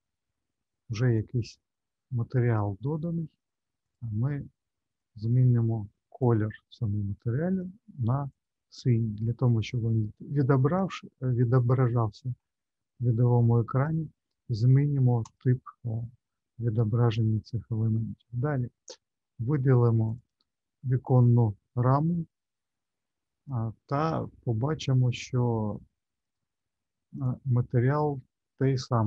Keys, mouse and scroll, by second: 3.9 click, 15.5 click, 20.1 click, 26.2 click.